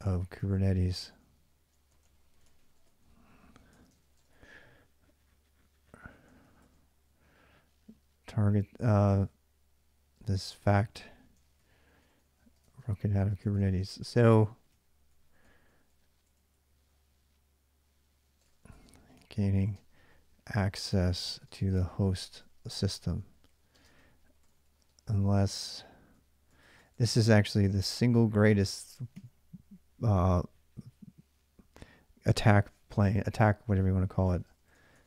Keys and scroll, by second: 0.0-4.8 typing, 6.1-16.7 typing, 11.2 ctrl+[, 18.3-30.0 typing, 18.5 ctrl+[, 34.1 ctrl+[, 34.3-35.0 typing, 34.6 Return.